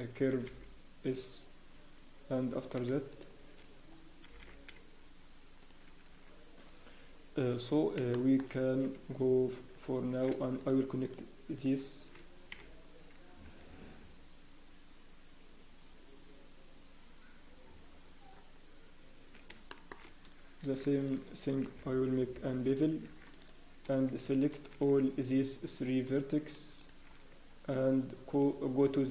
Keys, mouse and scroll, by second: 3.8-4.2 scroll, 4.8-5.4 scroll up 1, 7.4 scroll, 8.0 scroll down 1, 8.1 shift+middle click, 8.6 Tab, 9.8 scroll down 4, 10.1 click, 10.6 shift+middle click, 12.5 f, 12.8 scroll, 18.3 scroll up 1, 19.7 shift+middle click, 20.0-20.3 scroll up 1, 20.6 ctrl+?, 20.6 scroll up 3, 21.6 ctrl+?, 23.0 ctrl+?, 23.0 scroll up 2, 23.8 click, 24.1 shift+click, 24.6 shift+click, 26.0 click, 26.8 shift+click, 28.3 click, 28.9 right click.